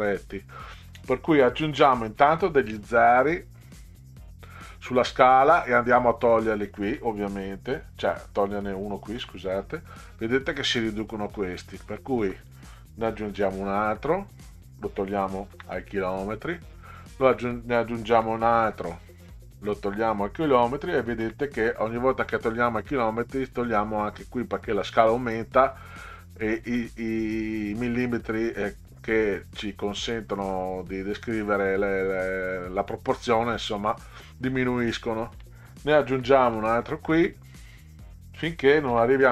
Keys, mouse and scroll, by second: 0.1 click, 2.2 0, 5.9 click, 8.3 click, 8.8 click, 9.2 Delete, 11.9 click, 13.3 0, 14.5 click, 15.5 Delete, 16.9 click, 18.1 0, 19.5 click, 21.3 Delete, 35.0 click, 36.1 0, 37.9 click, 38.9 BackSpace.